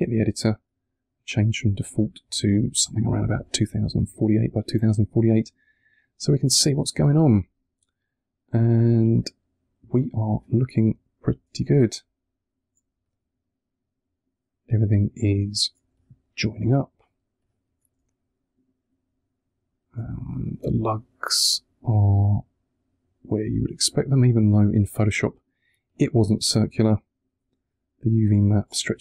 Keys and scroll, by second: 5.2 3, 14.6 3, 15.8 1, 17.8 3.